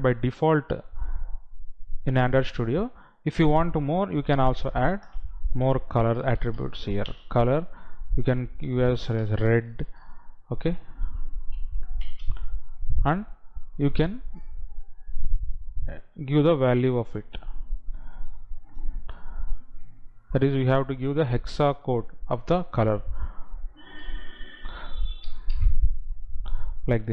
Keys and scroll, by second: 12.1 Right.